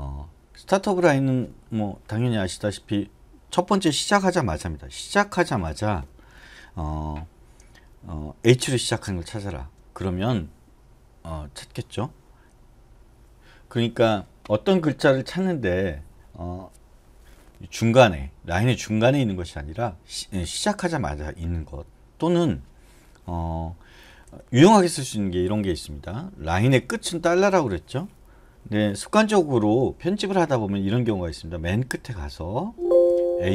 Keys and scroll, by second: 2.1 BackSpace, 2.5 BackSpace, 2.8 BackSpace, 5.3 ^, 9.0 h, 24.2 BackSpace, 24.6 BackSpace, 30.8-31.8 typing, 33.3 typing.